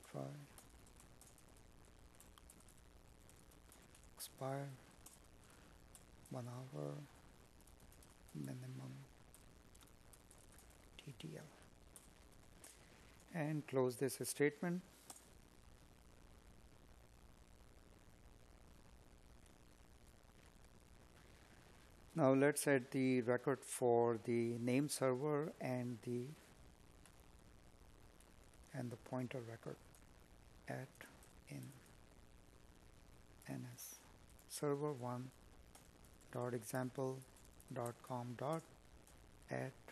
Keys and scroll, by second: 1.4 Tab, 2.5 Tab, 4.0 space, 6.7 space.